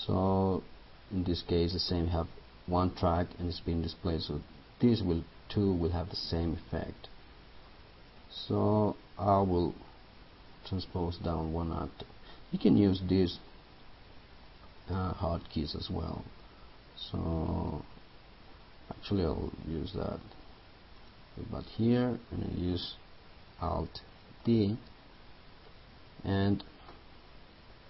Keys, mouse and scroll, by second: 24.5 alt+d.